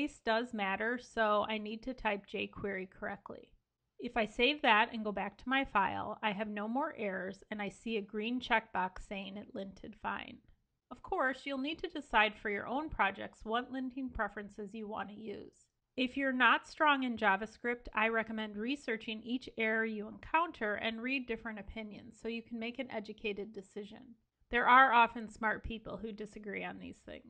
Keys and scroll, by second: 3.8 super+s.